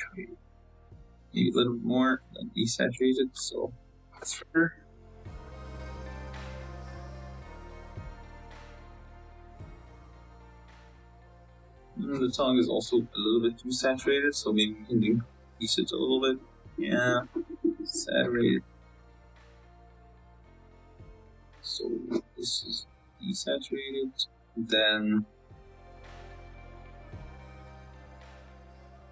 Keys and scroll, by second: 5.2 F12, 19.8 z, 20.5 z, 27.8 g, 28.5 z, 28.6 z.